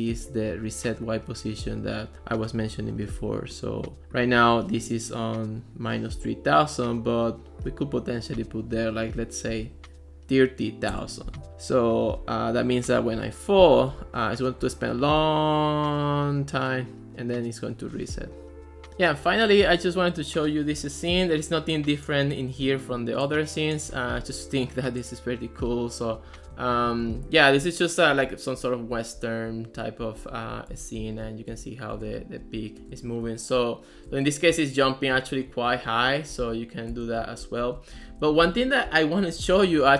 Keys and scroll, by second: 18.9 Right, 26.5-29.0 typing, 28.3 Left, 29.5 Right, 30.0-39.9 typing.